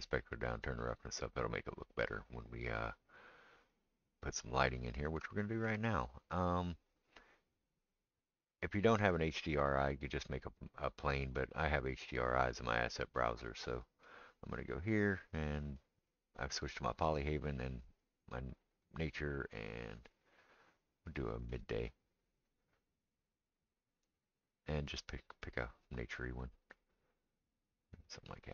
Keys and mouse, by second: 0.0-13.0 right drag, 13.0-28.5 right drag, 17.6 click, 18.8 click, 21.6 drag, 21.6 middle drag, 28.1 click.